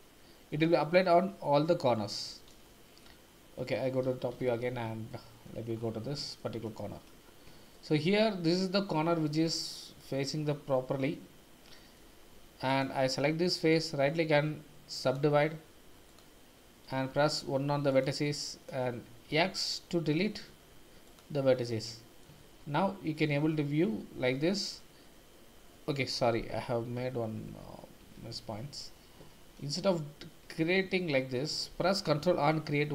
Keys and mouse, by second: 2.6 middle click, 4.0 KP_7, 4.4 shift+z, 5.1 shift+middle click, 6.4 shift+middle click, 7.7 shift+middle click, 12.3 3, 13.7-15.1 drag, 16.1-17.1 drag, 17.1 1, 17.9 click, 19.3 x, 21.6 middle click, 22.4 shift+z, 22.9 shift+middle click, 23.6-24.8 middle drag, 27.5 ctrl+z, 28.0 ctrl+z, 28.4 ctrl+z, 29.4 ctrl+z, 30.9 ctrl+z, 32.1 ctrl+r.